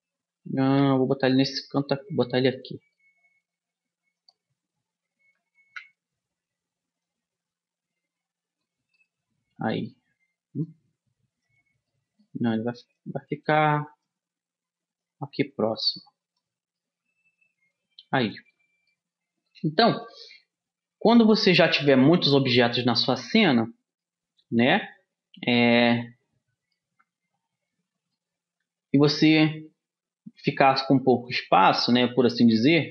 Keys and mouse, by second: 1.1 g, 3.0 middle click, 3.8 g, 4.2 middle click, 6.1 KP_1, 7.4-9.3 drag, 9.3 middle click, 9.5 middle click, 11.0 click, 12.3 click, 13.4-15.2 drag, 15.2 middle click, 15.4-17.2 drag, 17.2 middle click, 22.4-24.5 middle drag, 24.7 middle click, 24.9 middle click, 25.5 middle click, 25.7-29.0 middle drag, 30.5-32.9 middle drag.